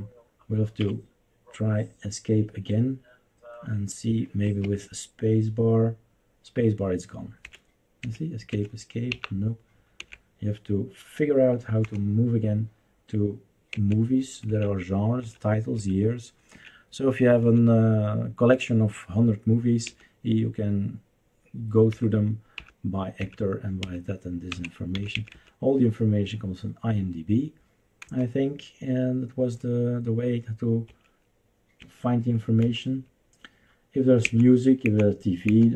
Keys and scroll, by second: 0.8 Escape, 4.4 space, 7.4 Escape, 8.0 Escape, 8.5 Escape, 9.1 Up, 10.0 Right, 11.8 Down, 13.7 Right, 14.4 Right, 15.2 Right, 15.8 Right, 16.5 Right, 17.4 Right, 18.6 Right, 19.9 Left, 21.9 Left, 22.5 Left, 23.2 Left, 23.8 Left, 24.5 Right, 24.9 Left, 25.1 Left, 25.3 Left, 28.0 Down, 30.9 Escape, 31.8 Escape, 32.6 Down, 34.2 Down, 34.8 Down, 35.4 Down.